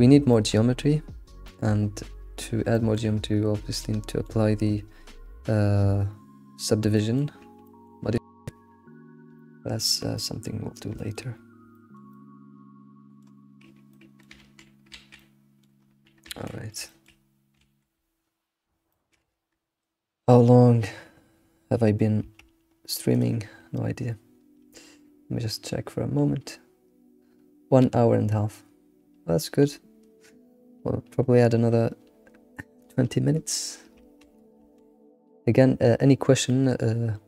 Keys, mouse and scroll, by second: 0.4-0.7 shift+middle drag, 1.0-1.9 scroll up 1, 1.9-2.4 scroll up 4, 2.4-2.8 scroll down 4, 2.8-3.4 shift+middle drag, 3.4-3.8 scroll down 2, 3.8-6.7 middle drag, 6.7-7.0 scroll down 1, 7.0 shift+middle drag, 7.4 scroll down 2, 7.7-8.3 middle drag, 8.3 ctrl+s, 8.6 scroll, 8.6-9.4 scroll down 2, 9.4-11.4 shift+middle drag, 11.5 scroll up 2, 11.8-13.5 shift+middle drag, 13.9-14.4 middle drag, 14.4 ctrl+s, 14.7 scroll down 2, 15.0 alt+shift+z, 15.2-15.9 middle drag, 15.9-16.3 scroll up 1, 16.3 ctrl+s, 16.5-17.3 middle drag, 17.3 scroll up 2, 17.6 alt+shift+z, 18.9-21.9 shift+middle drag.